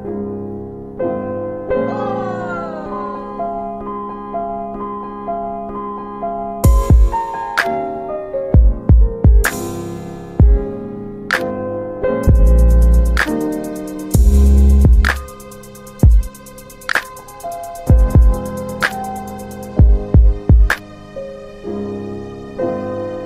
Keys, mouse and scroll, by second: 1.6 alt+w, 2.1 alt+w, 2.8 alt+middle click, 3.6 click, 4.2 alt+middle click, 5.2 click, 6.5 middle click, 8.7 click, 10.6 r, 12.2 click, 13.4 alt+w, 13.4 alt+middle click, 13.8 alt+w, 14.4 z, 15.4 middle click, 15.5 scroll down 2, 16.0 alt+w, 16.6 alt+w, 17.9 ctrl+z, 18.9 click, 19.4 middle click, 19.4-19.9 scroll down 3, 20.2 middle click, 20.3 scroll down 1, 21.8 shift+click.